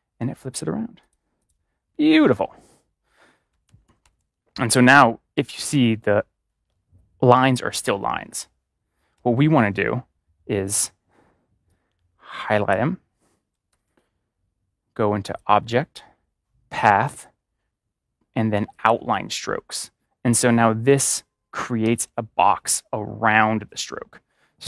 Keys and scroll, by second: 5.3 ctrl+y, 13.6 ctrl+y, 21.5 ctrl+y, 21.7 ctrl+y.